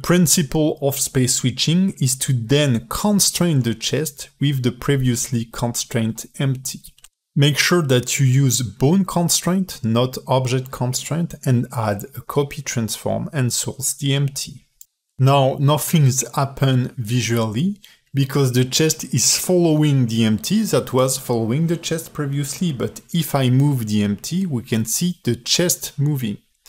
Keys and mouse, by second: 0.2 ctrl+Tab, 15.4-17.3 drag, 19.5 space, 22.0 ctrl+space, 22.2 ctrl+Tab, 22.5-23.2 drag, 23.2 g, 25.4 alt+h.